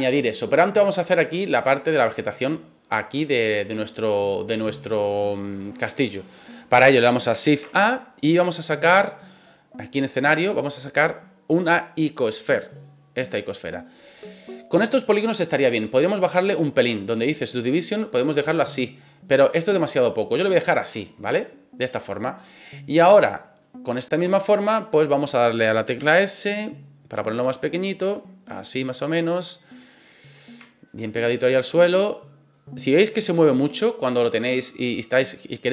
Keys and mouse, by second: 1.4-1.8 shift+middle drag, 2.8 click, 3.2-4.1 middle drag, 4.9-5.3 shift+middle drag, 7.5 shift+a, 16.2 click, 17.7-19.2 drag, 20.2 click, 22.7 right click, 23.1 right click, 23.6 middle click, 24.7 click, 25.9 s, 27.4 click, 28.0 s, 29.6 click, 30.0 middle click, 30.6 shift+middle drag, 31.2-32.2 middle drag, 32.6-35.7 middle drag.